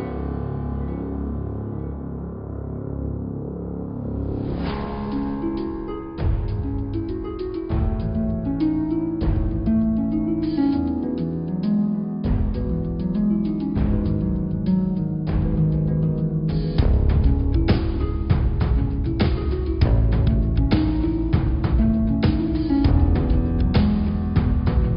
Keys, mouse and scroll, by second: 0.2 click, 1.1 click, 1.8 shift+click, 2.2 shift+click, 3.1 click, 3.7 click, 4.2 shift+click, 4.5-6.2 middle drag, 6.2 e, 12.6 middle click, 13.6 g, 15.5 g, 17.5-19.0 middle drag, 19.0 click, 19.5 click, 20.6 click, 21.7-22.7 middle drag, 22.7 g, 24.6 middle click.